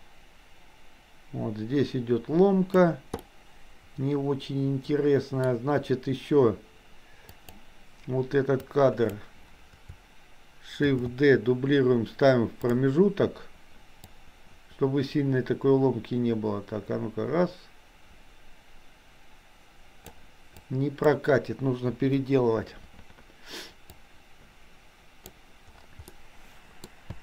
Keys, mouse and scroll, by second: 3.1-5.4 middle drag, 7.4 click, 8.6-9.1 drag, 11.0 shift+d, 14.3-20.3 drag, 20.5 click, 22.0 Delete, 24.1-25.5 drag, 26.0 middle click, 27.1 space.